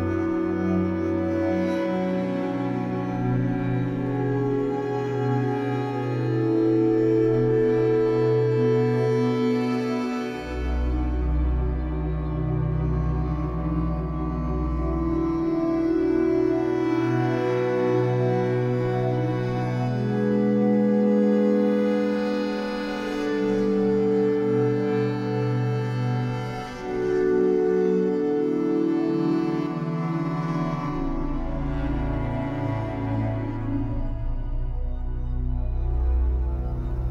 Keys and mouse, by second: 0.0 click, 1.3 click, 2.8 click, 6.8 click, 7.8 click, 10.1 click, 11.3 click, 13.2 click, 14.6 click, 15.4 click, 19.3 click, 22.1 click, 23.2 right click, 24.0 click, 28.7 click, 31.2 click, 32.5 click, 33.5 click, 34.6-36.5 drag.